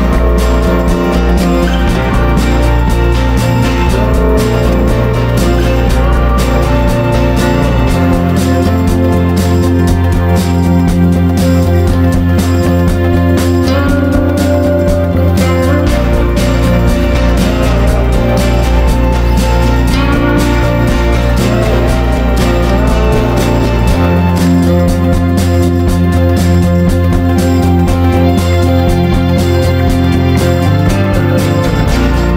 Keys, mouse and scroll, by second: 0.5 shift+click, 1.2 click, 2.2 ctrl+g, 7.4 shift+click, 8.0 click, 8.7 ctrl+g, 9.7 click, 10.6 ctrl+shift+g, 11.4 click, 12.2 ctrl+d, 12.4 click, 13.5 shift+click, 14.0 ctrl+g, 14.4-21.1 drag, 21.6 shift+click, 24.0 Down, 24.2 Down, 24.3 Down, 24.4 Down, 25.0 click, 25.6 Down, 26.7 Down, 27.6 click, 28.1 shift+click, 29.0 ctrl+g, 29.7-32.3 drag.